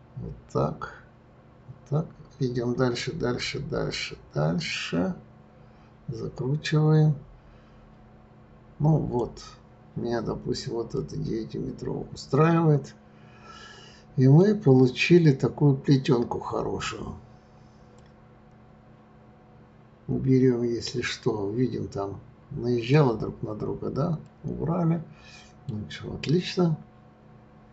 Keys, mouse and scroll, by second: 9.1 click, 11.0-14.0 middle drag, 14.7-17.0 scroll up 3, 17.9 click, 23.4-24.2 scroll down 1, 24.2-27.2 middle drag.